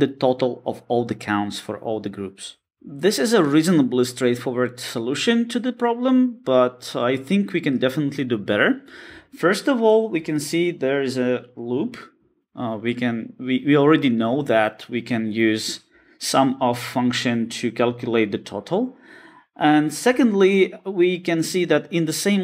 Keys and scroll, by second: 0.0 alt+shift+Left, 0.3 Escape.